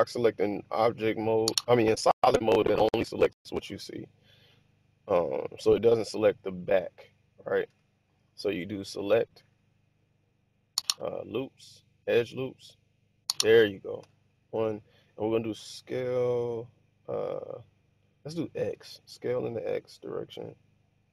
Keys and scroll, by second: 7.7 1, 14.3 1, 15.9 s, 18.6 x.